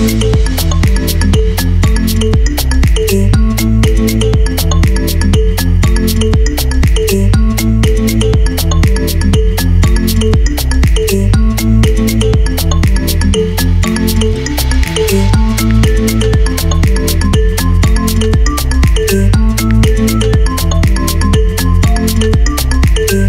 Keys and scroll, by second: 0.5 super+z, 0.7-1.5 typing, 3.4-4.2 typing, 6.1 super+Up, 6.7 Up, 7.2 Down, 7.4 super+Up, 8.2 super+Down, 8.6 Up, 8.9 Down, 10.0 Up, 10.1 Left, 10.3 Right, 10.5 Up, 10.7 Down, 10.8 Up, 10.9 Down, 11.4 Up, 11.6 Down, 13.9 super+s, 19.6 super+c, 20.6 super+v, 22.0 BackSpace.